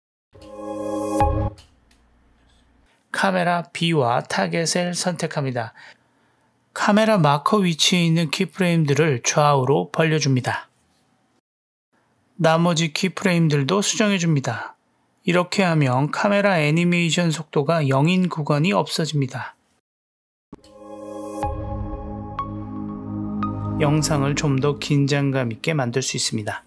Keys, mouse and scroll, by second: 0.3 space, 1.4 space, 3.5 click, 4.6-5.5 drag, 5.5 space, 6.2 space, 7.1 click, 7.4 g, 8.2 click, 8.6 g, 9.4 drag, 9.7 space, 12.7 click, 13.2 g, 13.9 click, 14.5 g, 15.8 click, 16.7 click, 17.7 g, 19.6-20.0 drag, 20.5 space, 26.1 space.